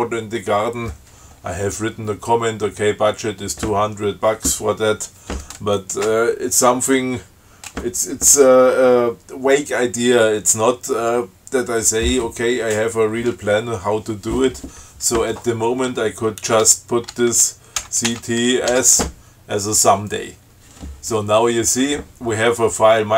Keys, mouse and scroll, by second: 18.0 ctrl+c, 18.3 ctrl+t, 18.9 s.